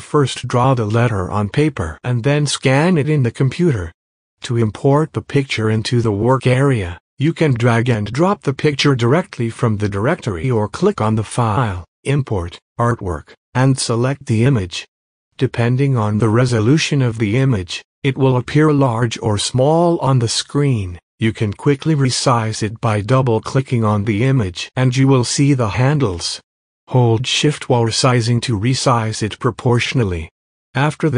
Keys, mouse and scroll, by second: 2.4-3.0 alt+scroll down 1, 5.3 click, 6.0 scroll up 1, 6.9 click, 12.5-17.1 drag, 17.7 scroll up 1, 18.4 alt+scroll up 1, 18.7 click, 18.9-22.4 drag, 20.3-21.4 shift+drag, 22.4-25.1 drag, 25.5 space, 25.7 click, 26.0 space, 27.8-31.1 drag.